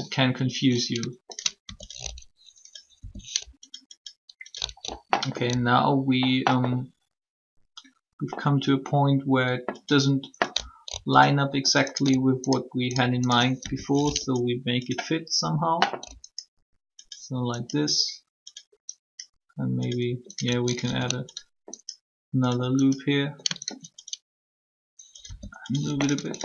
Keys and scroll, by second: 2.9 shift+r, 25.2 r.